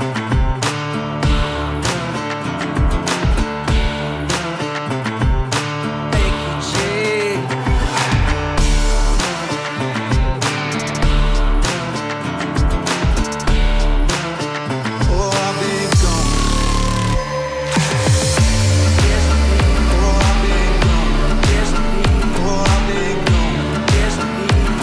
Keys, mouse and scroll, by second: 1.2 Return, 2.9 typing, 3.0 click, 4.7 shift+click, 5.3 right click, 7.2 click, 11.3-12.9 drag, 16.1-20.4 drag.